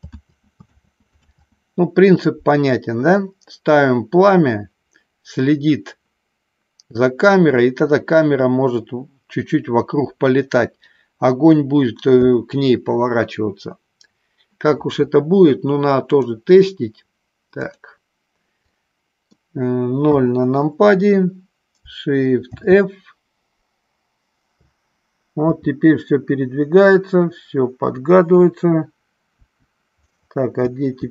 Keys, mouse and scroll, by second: 0.4 ctrl+z, 1.0 ctrl+z, 1.6 ctrl+z, 2.2 ctrl+z, 16.0 click, 17.6 click, 18.9 middle click, 20.2 KP_0, 22.5 shift+f, 24.6-25.5 Left, 28.5 Right, 29.5 Right, 30.7 Left, 30.9 click.